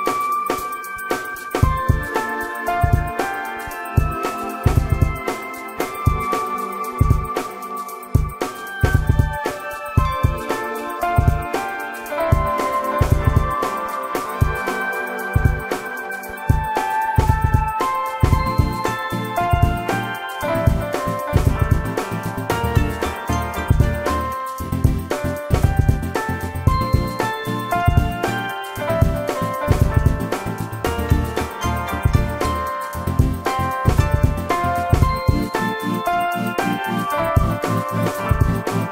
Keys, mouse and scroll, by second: 1.2 shift+middle click, 3.0 space, 8.9 space, 13.8 shift+middle click, 15.9 ctrl+g, 31.4 shift+middle click, 31.6 shift+double middle click, 32.6 typing, 37.1 space.